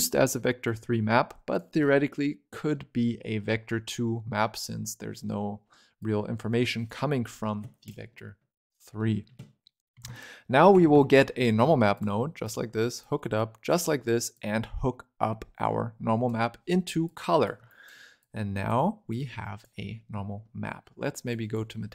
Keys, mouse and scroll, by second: 1.0 scroll up 8, 1.4 click, 1.7-4.7 scroll up 4, 5.9-7.8 drag, 9.0-9.6 scroll down 9, 9.6 middle click, 9.9 shift+a, 12.9 click, 14.2 click, 17.0 click, 17.6 ctrl+right click, 18.1 click, 19.0 click, 19.8 scroll up 5, 20.1-21.2 shift+middle drag, 21.2-21.9 drag.